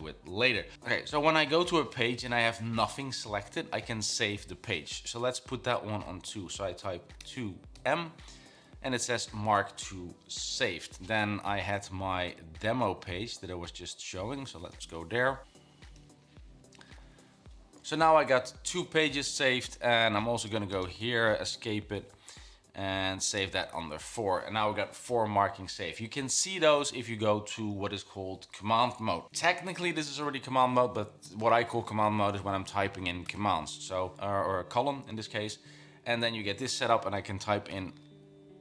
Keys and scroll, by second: 7.3-8.4 typing, 13.2 ctrl+[, 14.6-16.6 typing, 21.3 Escape, 23.1-24.0 typing, 33.4 typing, 37.0-38.6 typing.